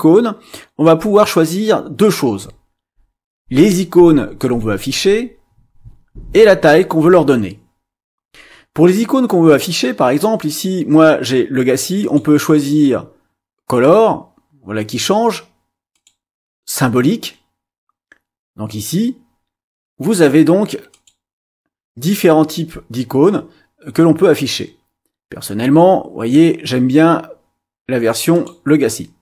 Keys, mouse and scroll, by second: 12.0 click, 15.9 click, 20.9 click, 28.3 click.